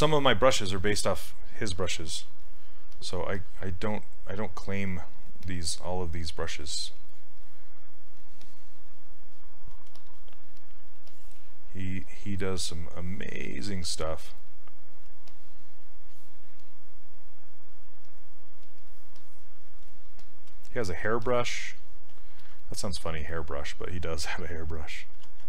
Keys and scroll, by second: 24.5 s.